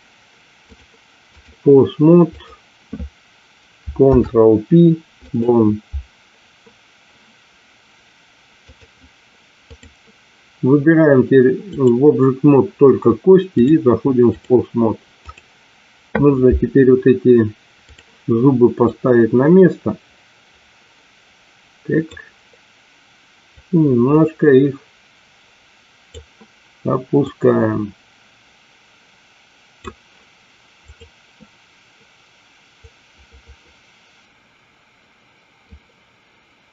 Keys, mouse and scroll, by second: 0.7-1.7 drag, 2.2 click, 3.9 ctrl+p, 8.6-10.1 drag, 11.8 click, 13.5-14.7 drag, 17.8 click, 18.8-22.4 drag, 23.6-26.3 drag, 27.3-29.9 drag, 30.8-31.9 drag, 32.9-35.8 drag.